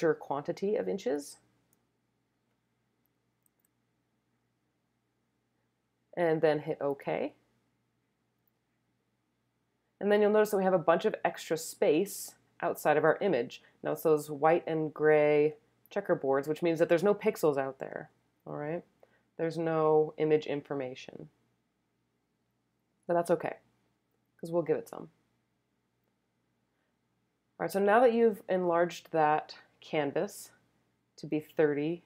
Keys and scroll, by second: 3.4 3, 5.1 0.